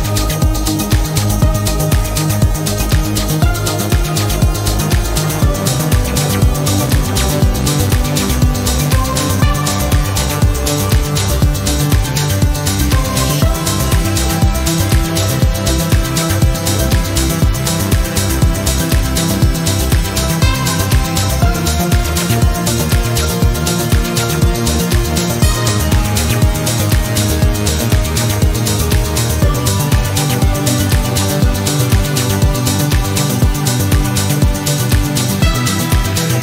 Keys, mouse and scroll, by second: 0.9 click, 3.2 click, 4.6 click, 6.9 click, 10.0-11.7 typing, 12.8 v, 14.0 click, 15.2-16.7 typing, 19.4 shift+8, 20.8-22.0 typing, 24.0 shift+0, 25.8 shift+8, 27.0-27.9 typing, 29.6 click, 31.0 right click, 32.7-34.0 drag, 35.3 click.